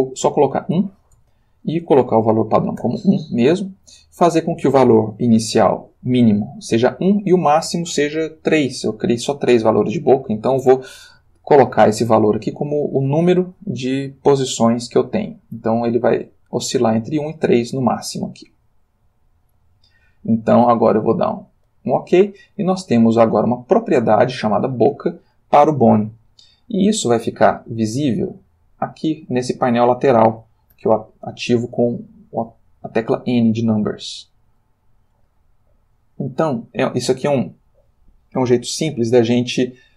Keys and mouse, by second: 0.2 1, 1.2 Tab, 2.8 1, 3.7 Tab, 6.3 1, 7.0 Tab, 9.1 3, 10.6 Return, 28.4 click, 30.7 n, 31.7 n, 34.1 click, 35.9 click, 36.4 middle click, 37.1-37.7 drag, 38.3 click, 39.1 click.